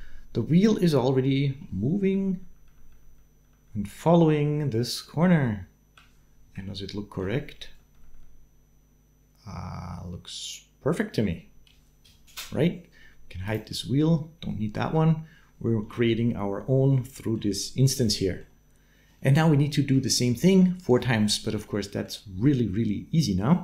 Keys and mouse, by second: 1.9 Right, 2.2 Right, 2.4 Right, 2.7 Right, 2.9 Right, 3.2 Right, 3.4 Right, 3.6 Right, 3.8 Right, 4.0 Right, 4.2 Right, 4.4 Right, 4.8 Right, 5.3 Right, 6.3 Right, 6.4 shift+middle click, 7.5 Right, 7.8 Right, 8.0 Right, 8.5-9.6 Right, 9.8 Right, 11.9 Right, 13.2 middle click, 16.7 middle click, 18.1 middle click, 19.1 middle click, 21.6 middle click.